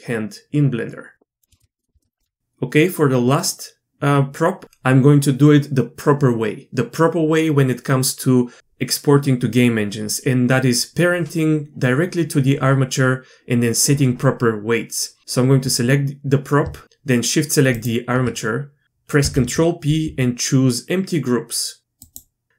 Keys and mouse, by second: 1.9 shift+middle click, 19.2 ctrl+p.